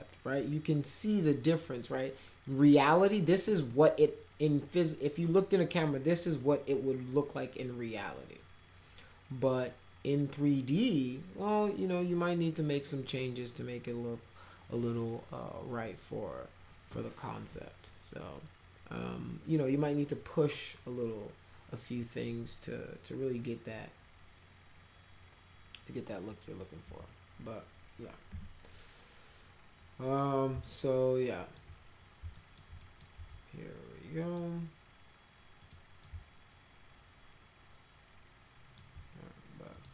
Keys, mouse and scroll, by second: 26.9 p, 28.3 p, 30.7 alt+middle click, 32.4 alt+middle click, 32.8 middle click, 34.2 middle click, 35.6 click, 36.1-38.8 alt+middle drag, 39.8 click.